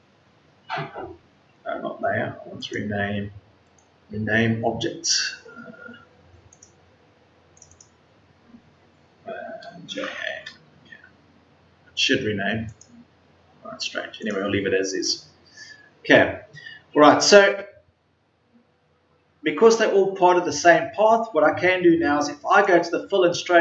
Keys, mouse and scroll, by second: 9.8 j, 10.2 Return.